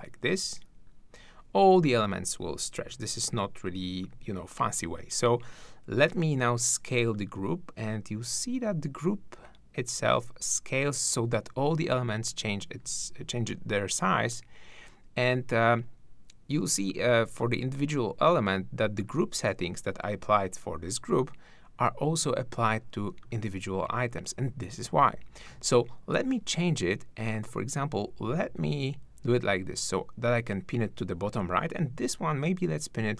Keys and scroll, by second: 2.8 super+z.